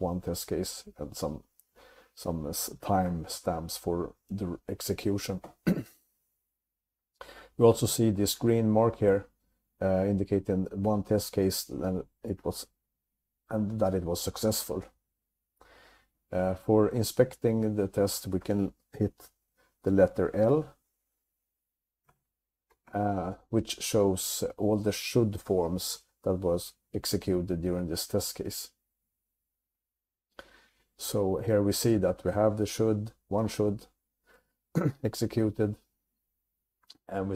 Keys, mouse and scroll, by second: 7.2 Up, 7.4 Up, 12.1-12.9 typing, 16.9-17.6 typing, 22.2 l.